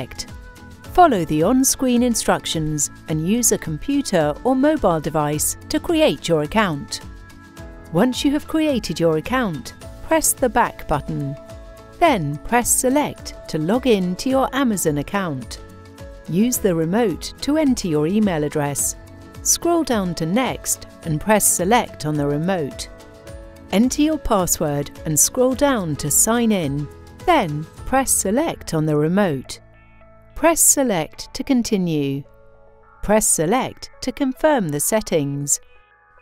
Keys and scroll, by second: 12.1 Return, 21.0 Return, 28.0 Return, 31.4 Return, 34.0 Return.